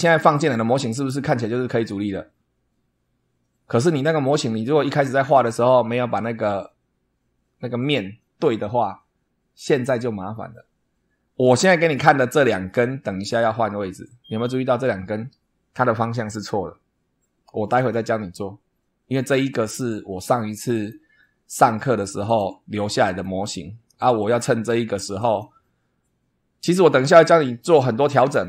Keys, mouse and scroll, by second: 0.0 super+2, 12.3 super+click, 20.7 click, 22.2 click, 23.0 click, 24.4 click, 25.2 click.